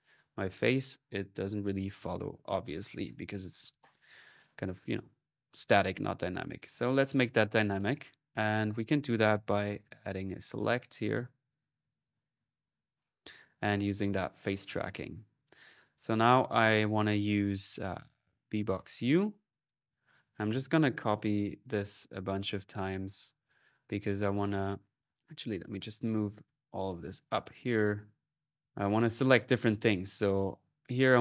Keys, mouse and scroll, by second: 3.8 click, 7.2-8.3 drag, 8.3 middle click, 8.9-10.9 drag, 10.0-10.7 typing, 11.2-12.5 drag, 12.9-14.8 drag, 16.6 click, 18.6 click, 19.3 click, 19.7-21.2 drag, 21.4-23.2 typing, 23.2 click, 24.4 click, 24.9 middle click, 25.0-26.1 right drag, 26.1-29.1 shift+drag, 27.3 shift+middle click, 30.8 click.